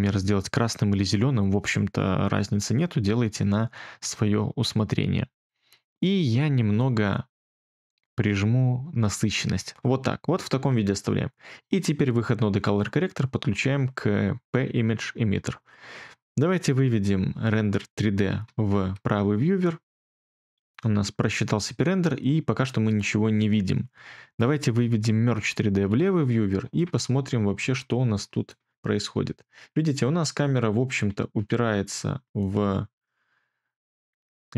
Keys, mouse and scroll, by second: 18.4 2, 25.8 1.